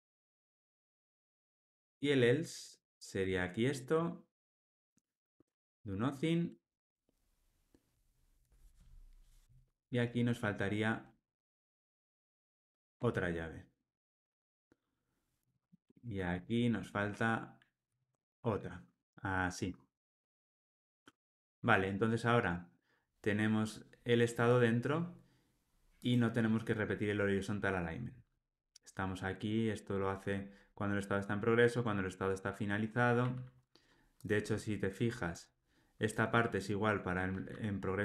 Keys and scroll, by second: 13.1 alt+super+l, 20.6 alt+super+l, 20.8 ctrl+alt+o.